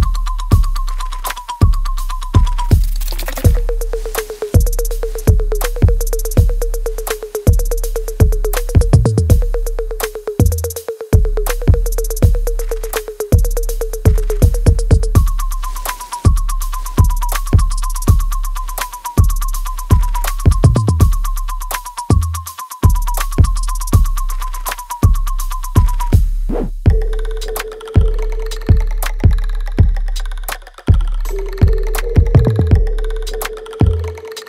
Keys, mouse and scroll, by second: 1.4 click, 3.6 right click, 4.3 alt+middle click, 4.8 alt+right click, 6.0-7.7 right drag, 7.7 alt+right click, 8.3 right click, 9.0 click, 9.3 alt+click, 10.3 alt+middle click, 10.9 alt+click, 13.9 alt+right click, 14.2 alt+click, 15.1 alt+middle click, 15.5 alt+right click, 16.0 alt+click, 16.7-18.0 drag, 18.6 space, 19.5-21.2 scroll down 1, 21.3 w, 23.1 click, 23.6 alt+middle click, 24.5-27.7 drag, 28.5-28.9 scroll down 1, 30.9-31.3 scroll up 1, 31.3-33.1 drag, 33.1-34.4 drag.